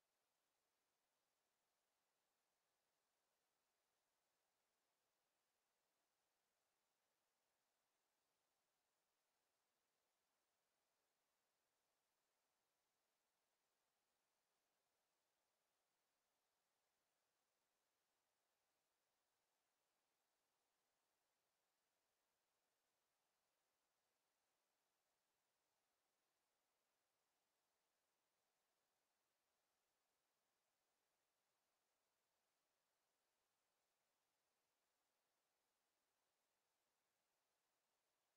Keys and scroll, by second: 21.3 w, 23.4 space, 24.8 w, 28.2 space, 28.6 w, 30.2 space, 31.2 w, 31.8 space, 32.0 w, 33.5 w, 33.9 space, 35.5 Escape.